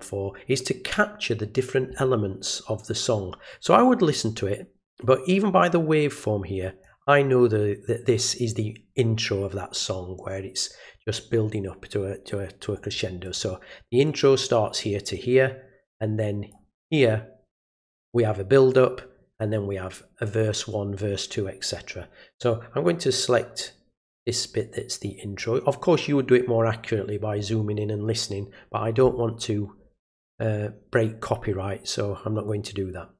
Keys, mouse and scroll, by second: 6.8-8.2 drag, 13.2 click, 14.0-15.1 drag, 15.9 click, 16.9-18.7 drag, 19.4-20.4 drag, 22.4-25.4 drag.